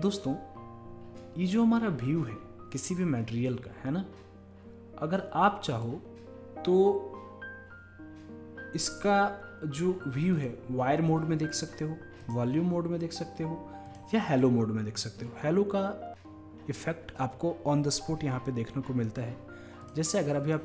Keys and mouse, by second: 5.8-7.6 drag, 10.4-20.6 drag.